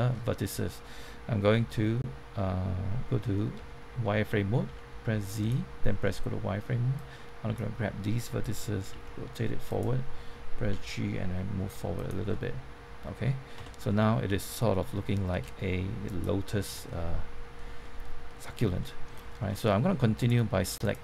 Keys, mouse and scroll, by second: 0.1-1.2 middle drag, 3.5 z, 5.3 click, 6.0 middle click, 6.9-8.2 drag, 8.8 r, 9.6 click, 10.6 g, 11.9 click, 12.2 middle click, 13.5 Tab, 13.8-15.2 middle drag, 15.3 z, 16.0 click, 16.6 scroll down 1, 16.8-18.8 middle drag, 19.2 scroll up 1, 19.5 middle click, 20.2 click.